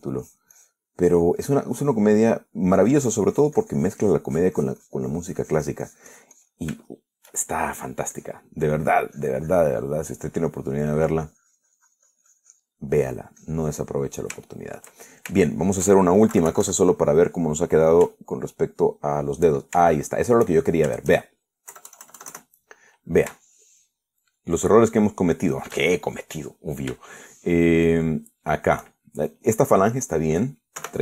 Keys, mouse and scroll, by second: 0.5 click, 0.6 middle click, 1.1-2.1 drag, 2.1 middle click, 2.8 middle click, 3.4 middle click, 4.0-7.9 drag, 8.1-9.3 shift+middle drag, 9.4 click, 10.4-11.7 drag, 11.9 middle click, 12.5-14.0 drag, 14.1 middle click, 14.6-15.7 drag, 15.9-17.1 shift+middle drag, 17.6 KP_Subtract, 19.7 shift+click, 21.2 shift+middle click, 23.0 KP_Add, 24.7-25.7 shift+middle drag, 26.0-27.0 shift+middle drag, 27.1-28.2 shift+middle drag, 28.4-29.4 shift+middle drag, 29.5 shift+middle click.